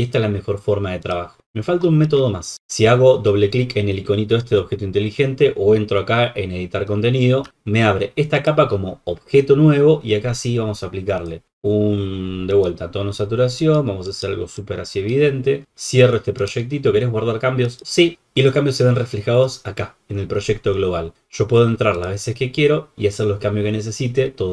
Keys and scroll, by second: 4.3 super+=, 7.4 super+-.